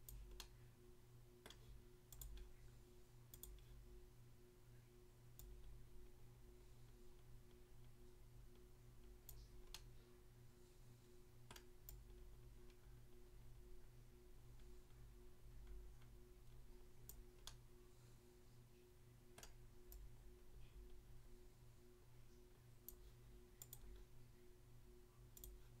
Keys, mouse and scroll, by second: 0.1 click, 0.4 middle click, 1.5 middle click, 2.2 click, 2.3 click, 3.3 click, 3.5 click, 5.4 click, 9.3 click, 9.8 middle click, 11.6 middle click, 11.9 click, 17.1 click, 17.5 middle click, 19.4 middle click, 19.9 click, 22.9 click, 23.6 click, 23.8 click, 25.3 click, 25.5 click.